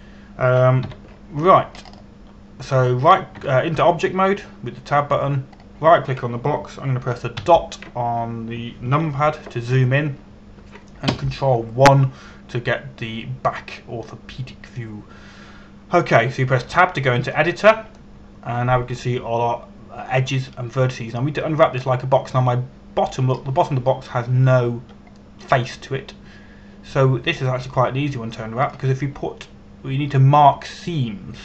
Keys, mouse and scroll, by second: 0.5 middle click, 2.5 KP_5, 3.4 scroll up 1, 4.6 right click, 5.0 Tab, 7.2 right click, 9.1 KP_Decimal, 11.7 scroll down 1, 12.7 ctrl+KP_1, 18.6 Tab, 19.6 middle click, 30.3 click.